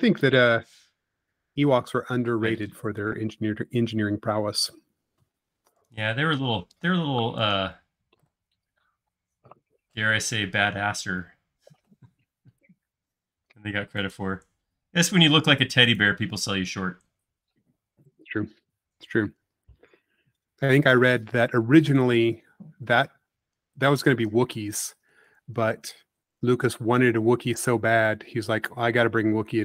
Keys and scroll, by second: 3.4 super+z, 3.9 super+z, 5.4 super+space, 8.7 q, 13.5 Left, 23.6 space, 27.0 m, 28.3-29.0 typing.